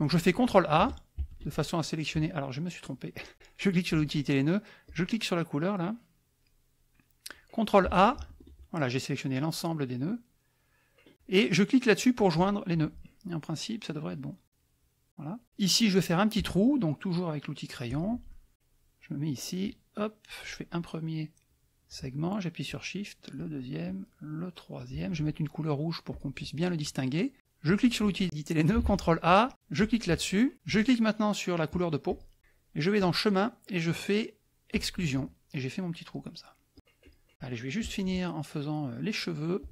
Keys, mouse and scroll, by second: 1.2 ctrl+a, 4.8 click, 6.4 click, 8.2 ctrl+a, 10.1 middle click, 12.3 click, 13.0 middle click, 14.2 middle click, 14.6 middle click, 17.8 click, 18.3 middle click, 19.6 click, 22.6 shift+click, 23.8-25.0 shift+drag, 26.1 click, 27.6 click, 28.8 ctrl+a, 29.7 click, 32.1 shift+click, 33.0 click, 34.8 click, 36.0 middle click, 36.7 click, 37.2 middle click, 37.3 right click, 37.8 -, 38.8 right click.